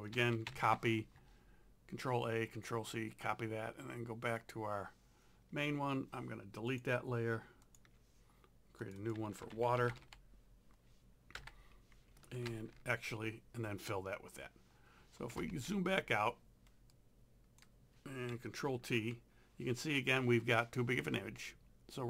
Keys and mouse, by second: 0.1 ctrl+a, 0.5 ctrl+c, 4.4 click, 6.7 click, 7.7 ctrl+click, 9.2-10.5 typing, 11.4 KP_Enter, 12.5 ctrl+v, 15.5 ctrl+0, 16.9 click, 16.9 z, 18.7 ctrl+t.